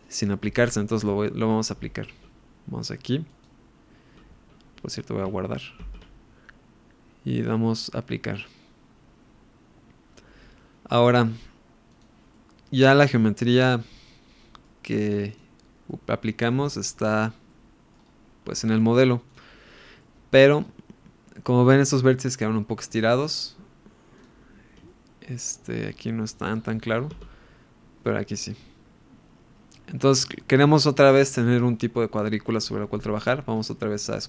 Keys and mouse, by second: 0.0 click, 0.7-1.5 middle drag, 3.2 click, 5.8 ctrl+s, 7.4-8.9 drag, 11.9 click, 12.3-14.6 middle drag, 15.3 click, 15.8-16.4 middle drag, 16.6-17.0 shift+middle drag, 17.4-17.9 middle drag, 18.5-19.3 right drag, 19.9-20.3 middle drag, 22.3 middle drag, 24.2 click, 24.8-25.8 shift+middle drag, 26.8 click, 27.3 Tab, 28.0 middle click.